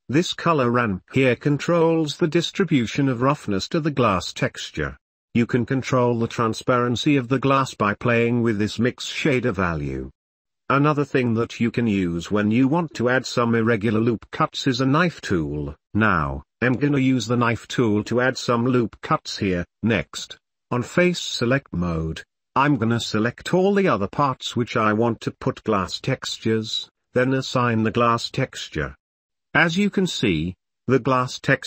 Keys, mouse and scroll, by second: 5.0 click, 5.2 ctrl+s, 7.5-8.8 middle drag, 10.3 middle click, 11.2 k, 13.7 shift+middle click, 13.9 shift+click, 14.1-15.1 shift+middle drag, 15.4 shift+middle click, 15.6 shift+click, 18.5 middle click, 18.8 shift+click, 18.8 shift+middle click, 19.6 ctrl+s, 19.9 shift+middle click, 21.4 shift+middle click, 22.4-23.5 shift+middle drag, 24.5 middle click, 25.0 shift+middle click, 25.3 scroll down 1, 26.3 middle drag, 28.4 shift+middle click, 29.5 ctrl+s, 30.8 click, 31.6 click.